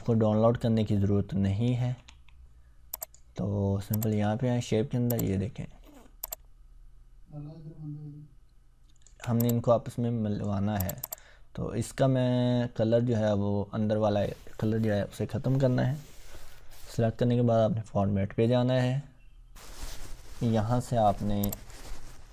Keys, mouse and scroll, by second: 1.5 ctrl+Tab, 2.9 click, 6.2-9.0 ctrl+drag, 19.5 click, 21.4 click.